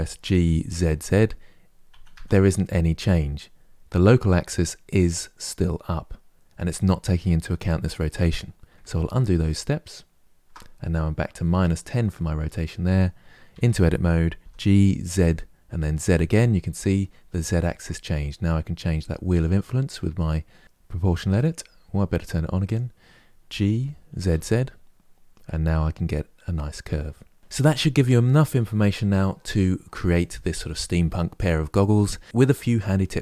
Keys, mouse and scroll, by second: 8.8 ctrl+z, 10.2 ctrl+z, 13.2 Tab, 14.2 g, 22.4 click, 23.2 g.